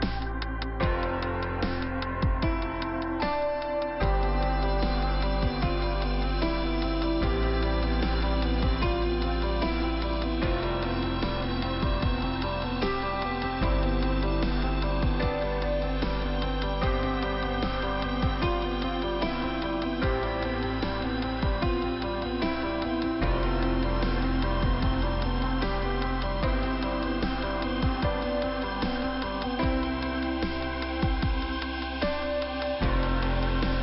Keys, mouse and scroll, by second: 1.4 click, 2.7 click, 2.8 click, 3.0 click, 3.7-4.0 scroll down 1, 6.4 middle click, 8.8 middle click, 10.2 scroll up 1, 14.9 click, 15.7-16.1 scroll up 1, 16.2 click, 17.3 click, 20.0 click, 21.5 click, 24.7 click, 25.5 click, 27.4 click, 28.9 click, 29.6 click, 31.0 click, 32.1 click, 32.8 click.